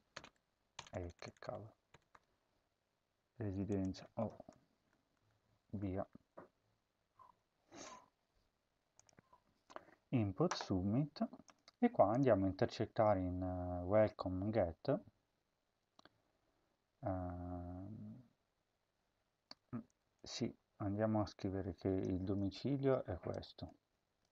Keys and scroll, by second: 0.0-1.3 typing, 4.1-6.5 typing, 7.6 typing, 9.2 ctrl+s, 22.1 ctrl+c, 24.2 ctrl+v.